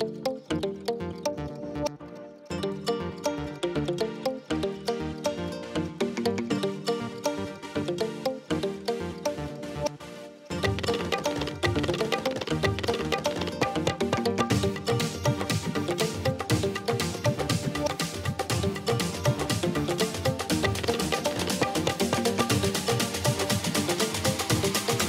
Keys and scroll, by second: 0.7 space, 3.3 space, 6.7 space, 7.7 space, 11.7 space, 12.0 space, 12.2 ctrl+alt+z, 14.1 space, 14.9 space, 18.6 ctrl+Return, 18.8 ctrl+space, 19.0 ctrl+space, 19.2 l, 21.4 space, 22.4 alt+space, 24.3 space.